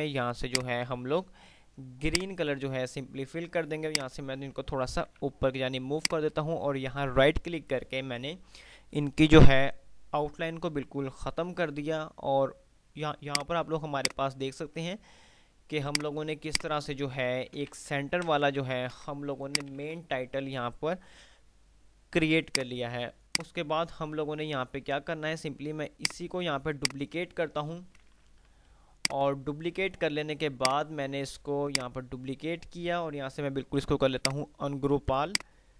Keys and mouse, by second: 4.8 ctrl+r, 6.2 right click, 11.5 F3, 13.7 click, 14.0 F2, 16.2 click, 17.0-17.8 alt+click, 17.8 ctrl+g, 18.3 Delete, 18.8 ctrl+z, 19.5 shift+click, 21.3 F3, 22.7 click, 26.2-27.8 click, 27.0-28.8 right drag, 28.8 F2, 29.2 click, 29.5 F2, 30.8-32.5 drag.